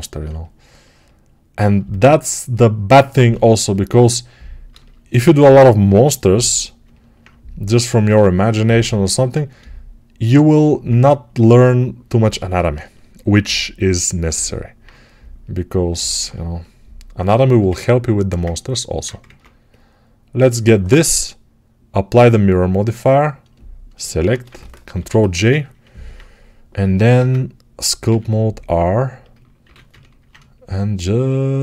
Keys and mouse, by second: 1.7-6.7 alt+shift+right drag, 5.0 alt+q, 6.7-11.4 alt+drag, 11.4-16.1 alt+right drag, 19.1 ctrl+Tab, 19.3-23.8 right drag, 23.8-31.6 shift+middle drag, 24.8 ctrl+j, 27.0 ctrl+Tab, 27.9 r, 29.6 ctrl+r.